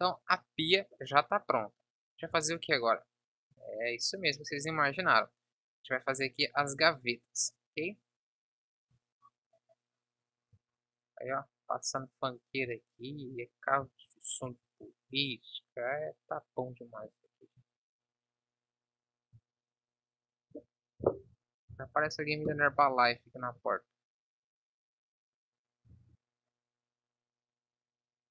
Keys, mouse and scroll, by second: 1.5 KP_1, 2.4 shift+a, 4.8 s, 6.1 s, 10.2 s, 12.7 Tab, 13.8 z, 17.0 KP_7, 19.4 b, 21.1 Delete, 23.6 b, 26.1 Tab, 27.2-28.3 drag.